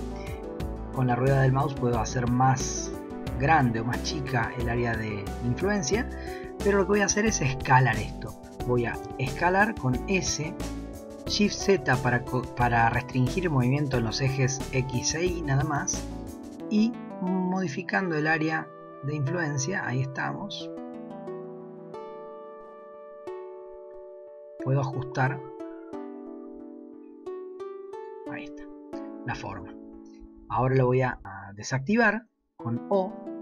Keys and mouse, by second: 9.0 s, 32.0 o, 33.1 o.